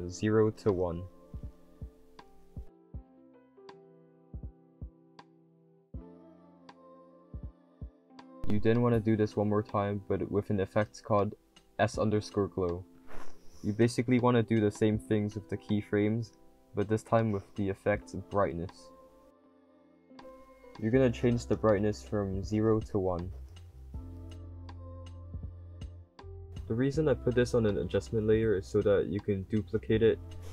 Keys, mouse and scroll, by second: 5.1-8.0 typing, 5.7 click, 6.3 click, 14.1-28.0 drag, 14.1 d, 27.4 w.